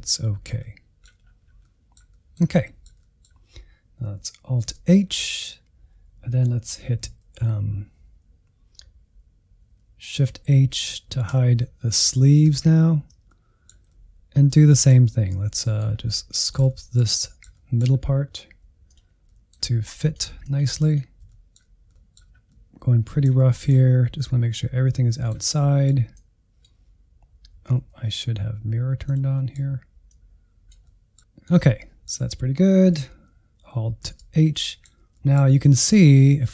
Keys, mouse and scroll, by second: 1.2-1.7 scroll down 4, 1.7-4.6 middle drag, 4.6 alt+h, 5.0-8.1 middle drag, 10.2-12.4 typing, 13.2-16.0 middle drag, 16.0-16.4 scroll up 1, 16.4-18.0 middle drag, 18.0-18.5 scroll up 1, 18.5 f, 19.1 middle click, 19.5 click, 20.2 shift+middle click, 20.7-21.3 scroll up 2, 20.8 shift+middle click, 21.3 click, 22.0 f, 22.4 middle click, 22.7 click, 23.4 middle click, 23.8 scroll down 1, 24.0 shift+middle click, 24.8 scroll down 2, 24.9-26.7 middle drag, 26.7 click, 27.5 ctrl+z, 28.2 click, 28.4 middle click, 28.8 click, 29.2 middle click, 30.0 scroll down 2, 30.2-34.0 middle drag, 34.0 alt+h, 34.5-35.6 middle drag, 35.6-36.5 scroll up 1.